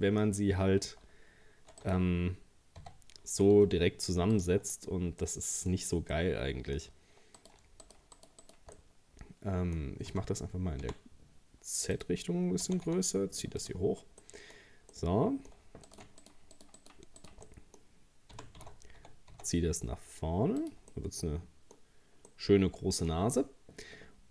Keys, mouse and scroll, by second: 1.1 ctrl+r, 2.8 a, 3.6 s, 4.7-5.2 scroll up 2, 5.2 middle click, 5.8 scroll up 1, 6.1-7.4 middle drag, 7.4 right click, 7.8 shift+right click, 8.2 shift+right click, 8.4 shift+right click, 8.8-10.1 middle drag, 10.1 s, 12.7 g, 13.9 scroll down 2, 14.2 middle click, 14.6-14.9 scroll up 1, 14.9 middle click, 15.9 right click, 16.2 shift+right click, 16.6 shift+right click, 16.8 shift+right click, 17.2 shift+right click, 17.5 middle click, 18.3 g, 20.9-24.3 middle drag.